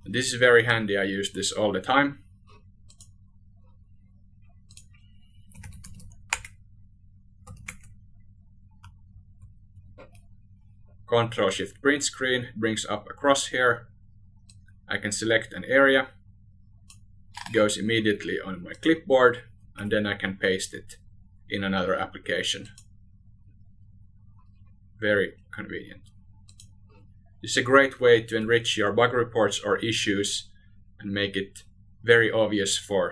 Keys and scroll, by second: 1.9 ctrl+a, 8.2 ctrl+shift+Print, 18.3 ctrl+v, 26.5 ctrl+a.